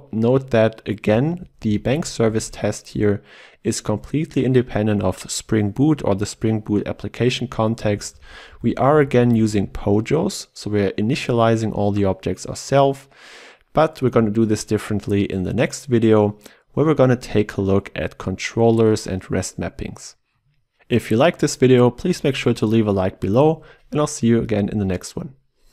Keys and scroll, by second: 2.3 ctrl+w, 9.1 ctrl+w.